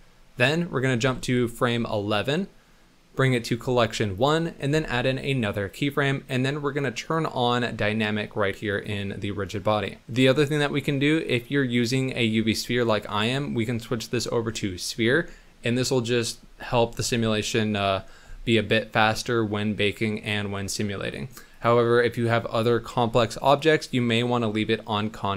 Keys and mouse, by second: 1.0 Right, 4.7 i, 7.1 click, 8.7 click, 11.8-12.3 drag, 13.2-15.0 drag, 21.6-25.3 drag.